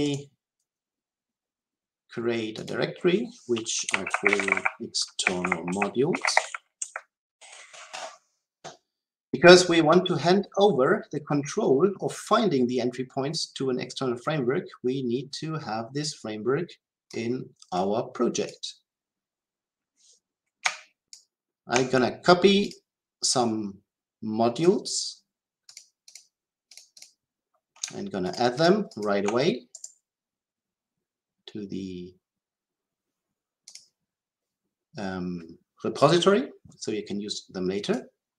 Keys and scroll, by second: 33.7 ctrl+alt+a.